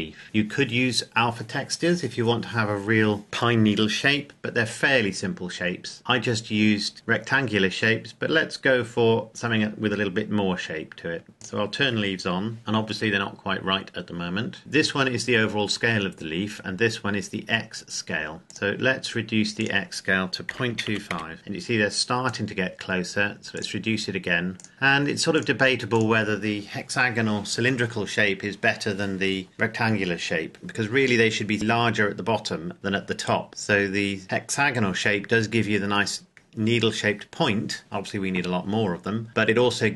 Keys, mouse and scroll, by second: 5.0-6.0 scroll up 1, 6.9 click, 11.3 click, 13.2-13.5 scroll up 1, 14.6 click, 18.5 click, 20.4 KP_Decimal, 20.7 KP_2, 20.8 KP_5, 21.0 KP_Enter, 22.2 click, 33.5-34.0 scroll up 1, 35.9-37.8 scroll down 1.